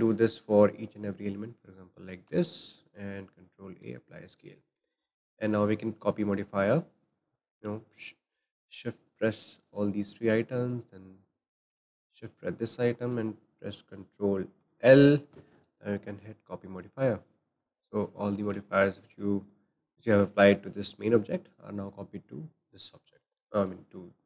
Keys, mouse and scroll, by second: 0.7 click, 1.0 shift+click, 2.2 ctrl+a, 4.3 click, 5.0-7.2 shift+middle drag, 7.2 click, 8.3-9.4 drag, 9.7 shift+click, 11.7 shift+click, 14.6 ctrl+l, 17.3 click, 17.6-20.4 middle drag, 20.4 click, 22.2 click, 23.1-23.5 scroll up 2.